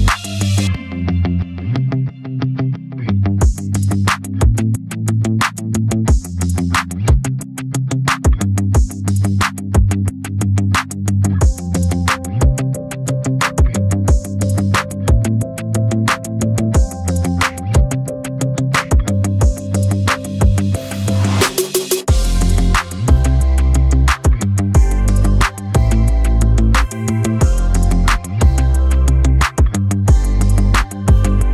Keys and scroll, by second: 20.7 d.